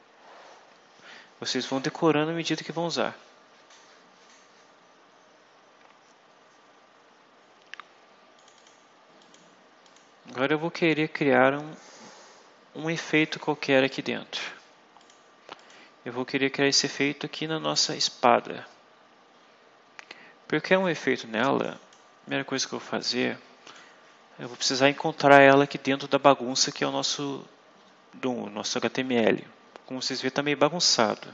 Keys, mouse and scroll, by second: 8.3 click, 9.1 click, 9.7 click, 14.9 click, 15.5 click, 20.7-22.0 drag, 22.5-23.8 drag, 29.0-29.5 scroll down 2, 29.6-30.7 scroll down 6, 30.8 scroll up 2.